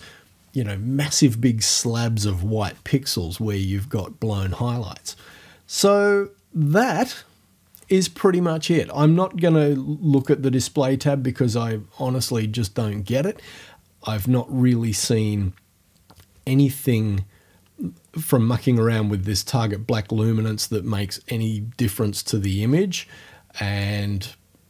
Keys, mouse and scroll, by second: 10.2 click, 22.6-23.8 scroll down 1, 23.8 click.